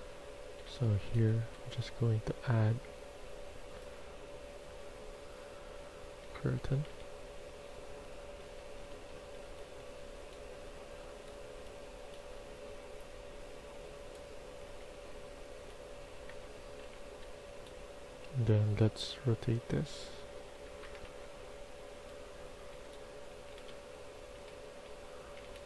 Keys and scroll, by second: 0.3-1.4 typing, 6.1-9.3 typing, 11.4 w, 14.2-17.1 typing, 20.2-20.9 typing, 21.0 Return, 22.3-25.6 typing.